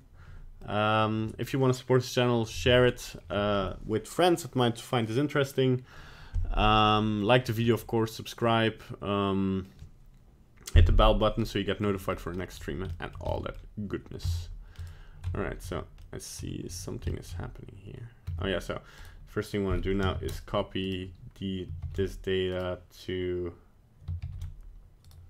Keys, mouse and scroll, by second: 0.6 middle click, 0.8 shift+middle click, 2.8 middle click, 7.0 middle click, 7.0 middle click, 7.3 middle click, 7.7 middle click, 8.3 middle click, 8.4 middle click, 8.7 middle click, 9.6 middle click, 11.2 middle click, 11.8 middle click, 12.1-12.4 scroll up 2, 12.4 middle click, 12.9 shift+middle click, 13.2 middle click, 14.3 Tab, 14.8 right click, 15.3 Tab, 15.7 Tab, 16.0 middle click, 16.4 Tab, 16.7 Tab, 17.1 shift+middle click, 18.3 Tab, 19.0 right click, 20.1 ctrl+c, 20.8 right click, 21.8 ctrl+v, 22.5 right click, 24.2 ctrl+c, 25.0 right click.